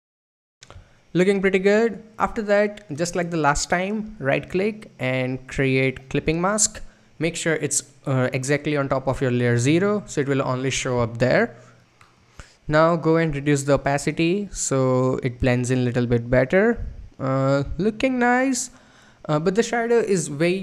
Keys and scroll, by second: 0.0 Up, 0.2 Right.